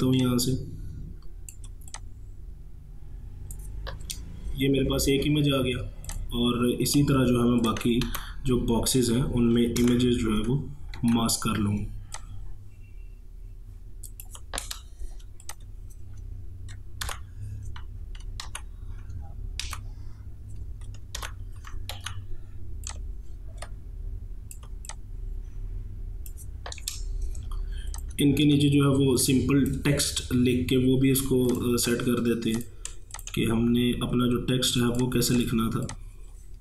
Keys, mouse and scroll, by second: 0.2-6.1 alt+drag, 6.1 click, 7.6 click, 8.1 ctrl+v, 9.8 ctrl+alt+g, 11.0 ctrl+t, 12.2-15.5 alt+drag, 17.0 ctrl+alt+g, 18.5 ctrl+z, 19.6 ctrl+v, 21.2 ctrl+alt+g, 22.0 ctrl+t, 22.9-24.9 drag, 24.9-28.0 drag, 28.5 ctrl+1, 29.0 space, 29.2 click, 29.5 space, 31.5 click, 31.8 space, 32.6 click, 33.2 shift+click, 35.9-36.6 alt+drag.